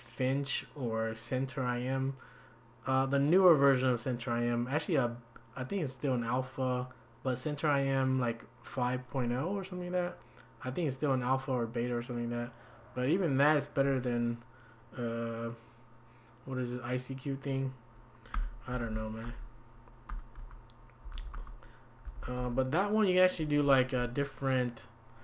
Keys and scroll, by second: 18.7 typing, 20.4 Return, 20.4-22.4 typing, 21.3 Return, 22.4 Return.